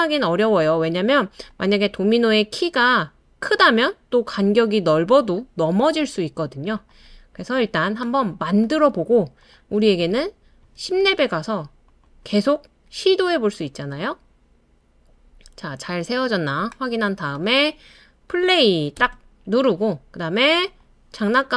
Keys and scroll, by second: 19.0 space.